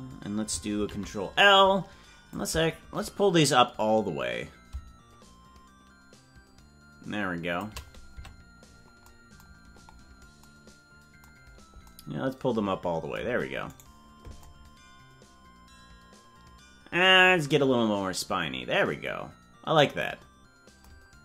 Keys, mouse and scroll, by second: 0.7 ctrl+l, 2.3-7.5 drag, 8.2 Tab, 9.7-10.6 scroll down 8, 11.4 scroll down 1, 13.9-14.5 right drag.